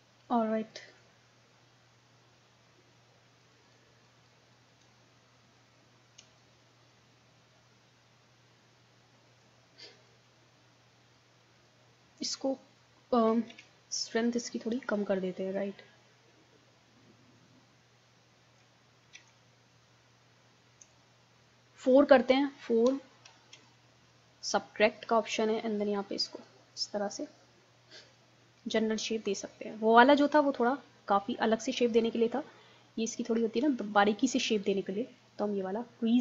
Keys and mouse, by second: 0.7-8.5 middle drag, 9.6 middle click, 10.9-13.1 middle drag, 13.5 ctrl+z, 15.0-16.8 drag, 18.4 ctrl+z, 19.2 ctrl+z, 19.8-21.9 drag, 23.5 4, 25.8 click, 27.2-30.4 middle drag, 31.1-36.2 middle drag.